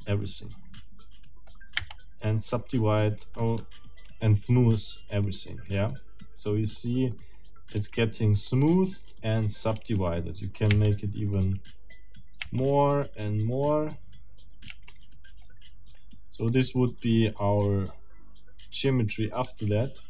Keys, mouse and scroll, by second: 1.8 w, 5.8 middle click, 6.8 middle click, 7.8 Tab, 8.5 click, 9.8 Tab, 10.7 w, 11.3 click, 12.4 w, 12.7 click, 14.7 Tab, 15.4-19.6 middle drag, 19.4 Tab.